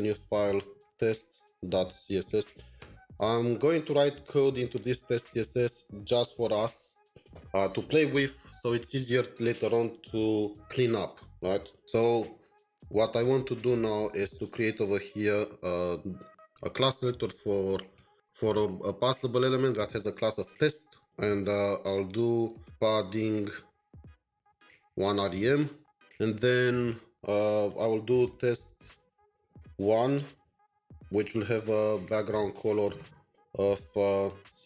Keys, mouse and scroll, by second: 0.7-2.7 typing, 0.8 right click, 2.8 Return, 15.3 Return, 16.4-18.6 typing, 20.1 typing, 21.3 typing, 22.4 Return, 22.4-25.8 typing, 26.7 Return, 27.8-29.8 typing, 31.2-32.3 typing, 31.2 Return, 32.8 Return, 34.4-34.6 typing.